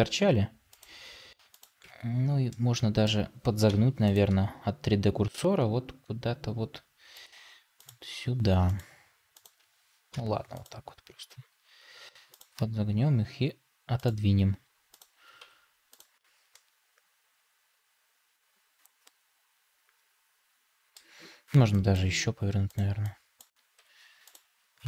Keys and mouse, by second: 1.8 Tab, 2.4 middle click, 3.6 middle click, 5.1 r, 11.5 r, 12.8 g, 14.4 r, 15.3 Tab, 16.4-20.8 middle drag, 21.8-22.9 drag, 23.3 click, 23.7 Tab.